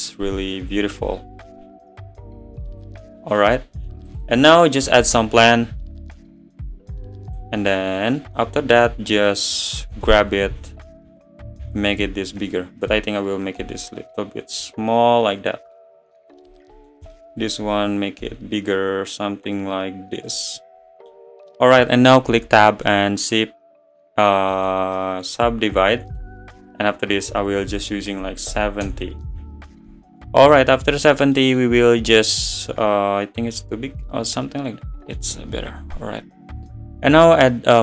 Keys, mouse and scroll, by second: 0.2-0.8 scroll up 3, 2.8 click, 3.3 middle click, 3.6 scroll down 2, 3.8-7.4 middle drag, 7.4 shift+a, 7.8-8.2 scroll down 7, 8.2 middle drag, 8.4 `, 8.8 scroll up 2, 9.9 scroll up 3, 9.9 s, 12.8 click, 13.6 s, 15.5 click, 16.6 click, 16.7-17.1 middle drag, 17.1 click, 17.3 scroll down 4, 17.8 `, 18.2 s, 20.8-22.3 scroll down 5, 22.3 Tab, 24.7-28.9 right drag, 28.9 BackSpace, 29.9 Tab, 30.2-30.9 middle drag, 30.9 scroll up 6, 31.4-31.7 middle drag, 31.7 scroll up 4, 32.3-32.7 middle drag, 32.7 s, 34.5-35.3 middle drag, 35.3 s.